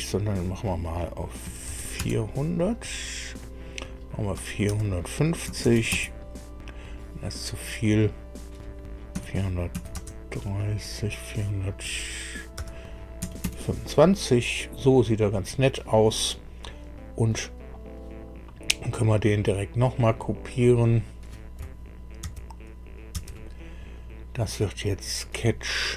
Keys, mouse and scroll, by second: 1.4 KP_4, 1.6 KP_0, 2.0 KP_0, 4.4 BackSpace, 4.6 BackSpace, 5.4 KP_5, 5.9 KP_Enter, 5.9 KP_0, 8.0 click, 9.1 KP_4, 9.9 KP_3, 10.0 KP_0, 11.8 BackSpace, 12.5 BackSpace, 13.4 KP_2, 13.4 KP_5, 20.0 click, 20.8 click, 22.2 ctrl+c, 23.1 ctrl+v, 24.8 click.